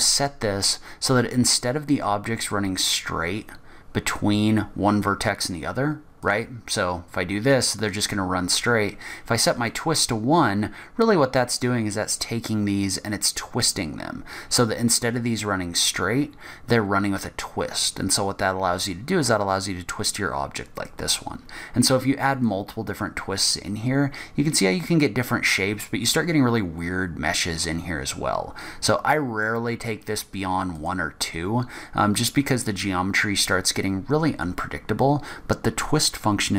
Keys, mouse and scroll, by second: 6.4 click, 9.9 click, 10.9-11.8 scroll up 4, 17.9-18.3 scroll down 3, 20.7 scroll down 2, 21.1 middle click, 22.6 click, 30.9 click, 32.3 click, 34.6 scroll up 2, 35.4-35.8 scroll down 2.